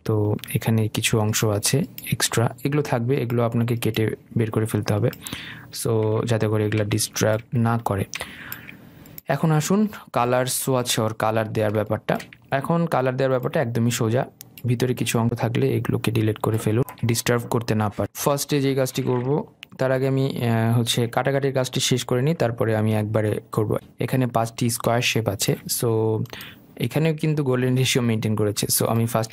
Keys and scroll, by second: 2.9 Delete, 16.8 Delete.